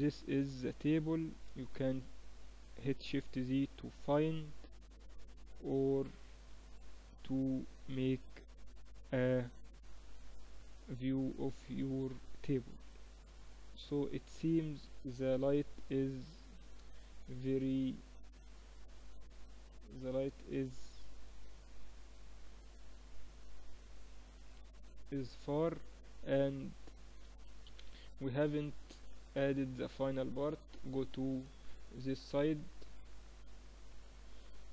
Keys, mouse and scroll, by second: 1.4 shift+z, 3.8-5.1 middle drag, 8.5-10.2 middle drag, 10.4-12.3 middle drag, 15.5 KP_0, 17.3 shift+b, 20.7 shift+b, 25.6-28.1 middle drag, 28.1 z, 28.8 KP_1, 30.1 KP_3, 31.1-33.2 middle drag, 33.4-34.7 drag, 34.5 a.